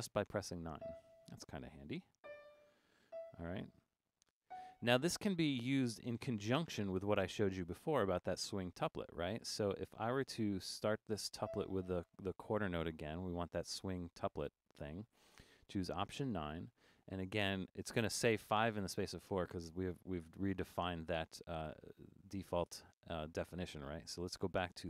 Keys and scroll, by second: 16.1 alt+9.